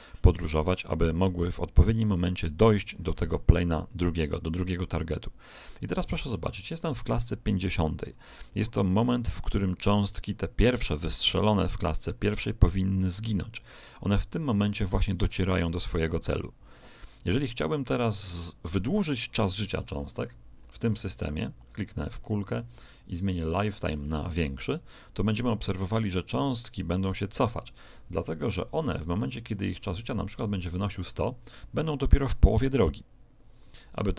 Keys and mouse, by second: 20.1-21.6 middle drag, 21.6 right click, 24.3 click.